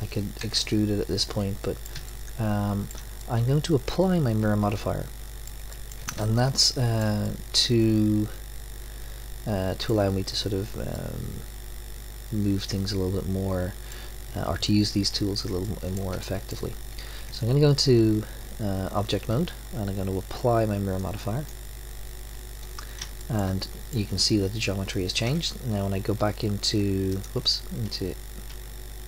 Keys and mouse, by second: 0.4 KP_3, 10.9-13.3 middle drag, 15.6 middle click, 17.2 Tab, 21.0 click, 23.2-25.1 middle drag, 27.2-29.0 drag.